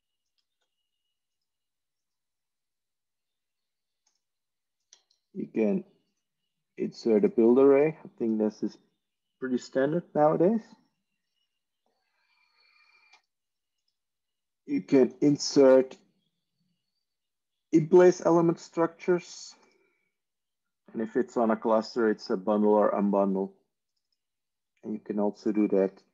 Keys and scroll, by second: 0.5 alt+F4, 24.5 ctrl+e.